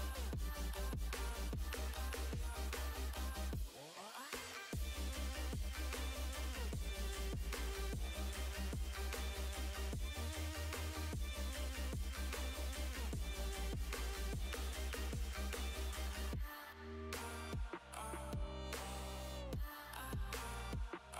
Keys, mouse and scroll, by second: 5.8-6.3 scroll down 1, 6.3-8.1 middle drag, 8.1 a, 10.9-13.1 drag, 14.8-17.0 middle drag, 17.0 click, 17.3-21.1 middle drag.